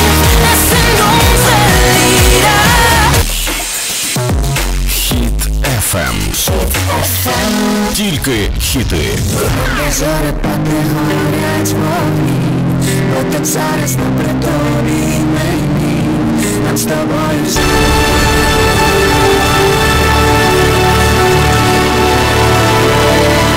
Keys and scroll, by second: 3.3 Page_Down.